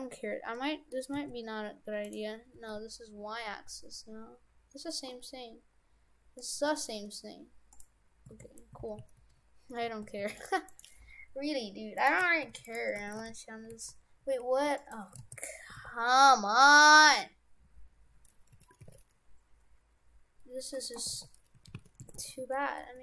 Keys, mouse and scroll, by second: 0.0 scroll down 1, 0.6 middle click, 1.2 s, 2.5 s, 6.6 Tab, 7.8 click, 8.3 shift+f, 10.6 right click, 11.7 Delete, 12.0 right click, 12.5 shift+d, 13.0 shift+f, 15.2 ctrl+z, 15.7 r, 21.1 r, 22.2 shift+f.